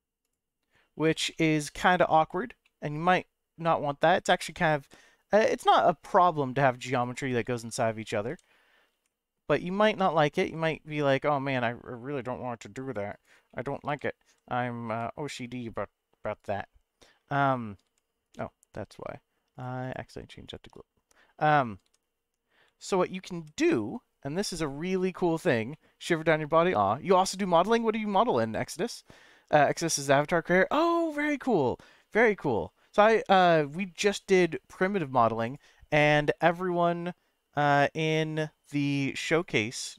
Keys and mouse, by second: 0.2 click, 1.3 shift+middle click, 2.6 middle click, 4.5 e, 4.8 h, 4.8 g, 5.5 g, 7.0 right click, 7.4 ctrl+z, 8.3 g, 8.9 y, 10.4 x, 13.1 right click, 13.5 middle click, 13.9 g, 14.2 x, 14.9 y, 16.4 click, 17.8 g, 18.2 right click, 19.6 click, 19.9 click, 21.8 g, 22.6 x, 23.3 y, 24.5 right click, 25.7-26.9 middle drag.